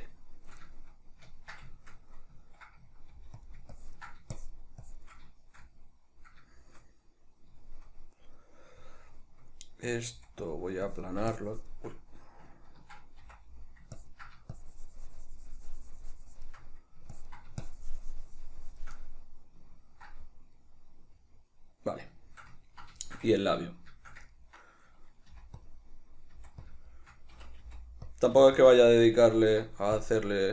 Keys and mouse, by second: 0.9-3.7 shift+middle drag, 3.3 f, 3.9-5.5 ctrl+drag, 5.5-10.7 shift+middle drag, 10.3 f, 11.1-19.1 drag, 13.3 c, 19.1-25.8 middle drag, 25.4 f, 25.8 click, 26.0 middle click, 26.4 f, 26.8 shift+click, 27.0-28.2 shift+middle drag, 27.4 c, 28.2 click, 28.4 f, 28.8 click, 28.9-30.0 shift+middle drag, 30.0 click.